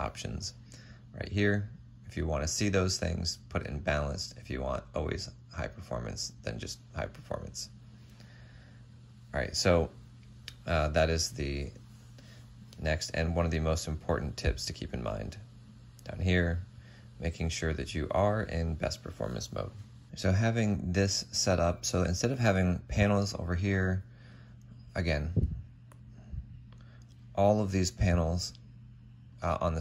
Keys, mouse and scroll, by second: 24.8 Tab.